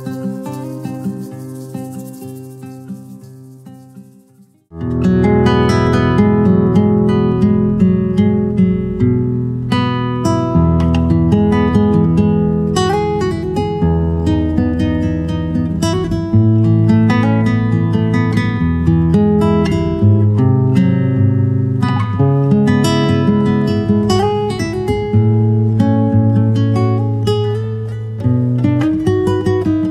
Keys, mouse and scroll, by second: 0.8 shift+middle click, 2.7 middle click, 3.1 shift+click, 4.6 Tab, 6.2 click, 6.4 click, 6.7 click, 7.8-8.2 middle drag, 8.4 middle drag, 9.3 middle click, 11.1 click, 11.8 click, 14.9-15.4 middle drag, 15.6 middle drag, 16.4 middle click, 16.8 click, 17.7-18.0 middle drag, 18.3-19.1 middle drag, 19.6 middle drag, 20.7 middle click, 21.2 click, 22.4 shift+middle click, 23.5 click, 23.7 click, 24.0 click, 24.1 click, 25.4 click, 25.6 click, 27.3 click, 27.5 click, 27.6 click, 28.2 click, 28.4 click, 28.6 click, 28.8 click, 29.2 click.